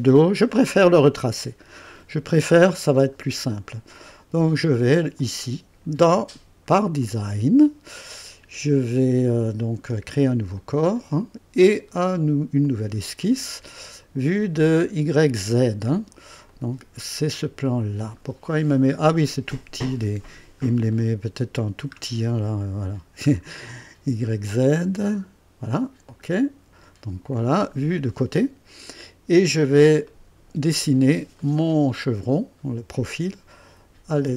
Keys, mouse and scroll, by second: 2.8 scroll down 2, 5.2 click, 7.0 click, 10.5 click, 12.6 click, 16.5 click, 17.7-18.4 scroll down 2, 18.4-19.0 scroll up 2, 19.3-19.9 right drag, 20.4 scroll up 2, 20.9-21.8 right drag, 21.9-22.2 scroll up 2, 23.3-23.9 scroll down 3, 26.1 click, 27.4 right click, 29.5-29.9 scroll up 1, 30.1 right click, 30.8 scroll up 1, 31.4 right click, 34.2 click.